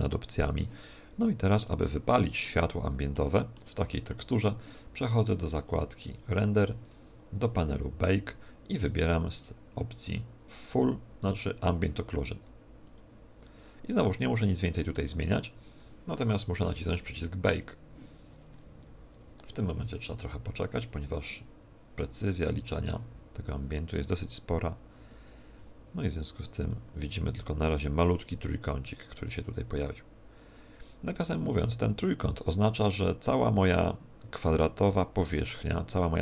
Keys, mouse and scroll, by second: 2.4 middle click, 3.5 middle click, 5.6 click, 8.8 click, 17.5 click, 25.1 click.